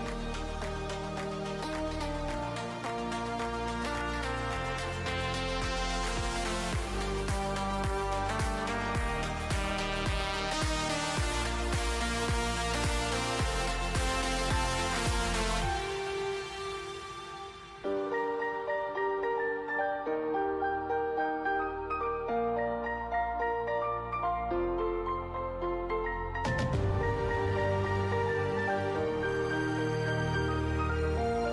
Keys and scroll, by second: 1.3-6.8 typing, 10.1-12.9 typing, 15.0-16.0 typing, 18.1-21.0 typing, 22.5-23.6 typing, 25.6-30.1 typing.